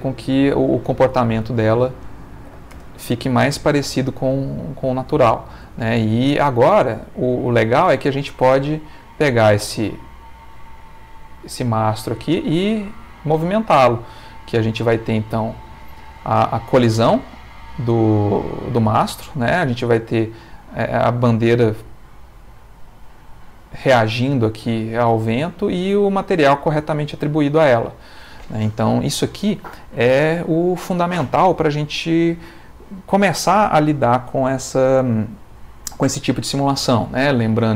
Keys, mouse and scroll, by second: 1.4 click, 2.3 1, 2.5 0, 2.7 Return, 4.2-5.7 middle drag, 6.7 click, 8.4 g, 28.0 click.